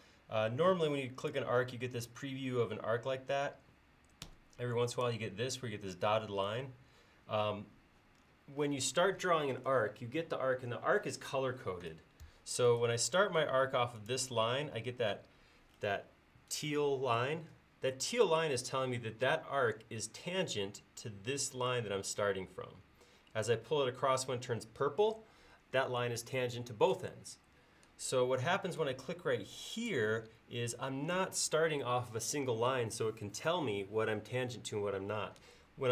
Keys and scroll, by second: 4.3 Escape, 12.3 Escape, 28.3 Escape.